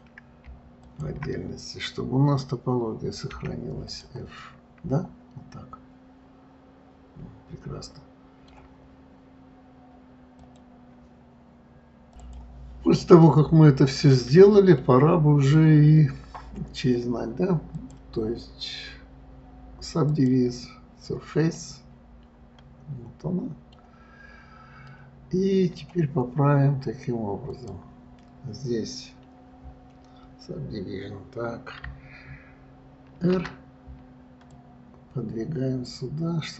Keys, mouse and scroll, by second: 0.1 click, 1.1 shift+click, 4.2 click, 4.7-7.7 middle drag, 12.6 middle click, 13.5-15.1 middle drag, 15.1-16.0 scroll down 2, 16.0 scroll up 2, 17.7-18.0 scroll up 1, 18.0-21.0 drag, 21.8-24.5 middle drag, 24.5-25.1 scroll up 2, 25.1-27.7 middle drag, 27.7 click.